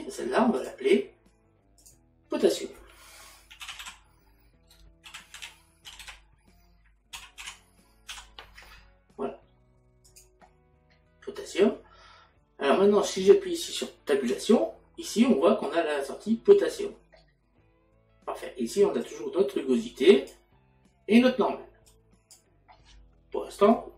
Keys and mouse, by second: 0.6 click, 2.4 click, 10.1 click, 13.7 click, 19.0 click, 21.9 click.